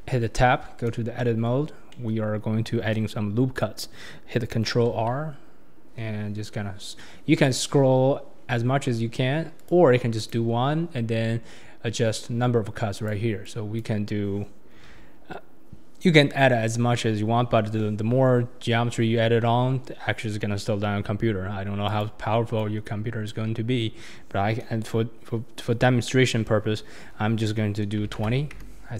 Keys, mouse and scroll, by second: 0.1 Tab, 1.2-4.8 middle drag, 4.8 ctrl+r, 7.2-10.2 drag, 7.2-10.2 middle drag, 7.2-10.2 right drag, 12.9-16.1 drag.